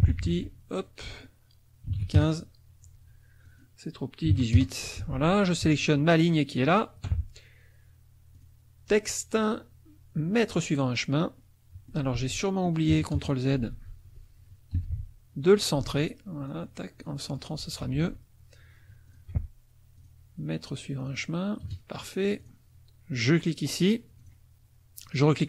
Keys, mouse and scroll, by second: 0.3 ctrl+a, 1.1 click, 1.9 KP_1, 2.0 KP_5, 2.2 KP_Enter, 3.4 ctrl+click, 4.3 KP_8, 4.6 KP_Enter, 5.0 F1, 6.5 shift+click, 8.4 click, 10.5 click, 11.3 middle click, 11.5 click, 12.2 ctrl+z, 12.3 ctrl+click, 12.7 ctrl+middle click, 12.9 ctrl+KP_Subtract, 13.2 ctrl+KP_Add, 13.7 ctrl+z, 14.7 t, 15.5 click, 15.9 ctrl+a, 16.5-17.5 drag, 17.8 F1, 19.1 shift+click, 20.0 click, 21.0 click, 21.6 KP_Subtract, 22.4 click, 23.2 click, 24.2 click.